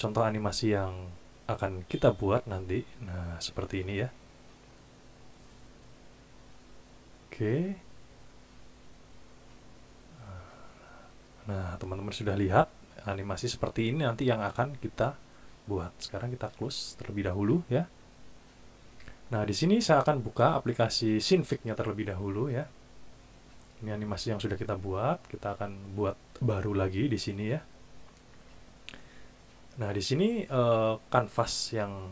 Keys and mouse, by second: 2.0 click, 16.6 click, 20.3 click, 25.4 click, 29.7-31.1 drag.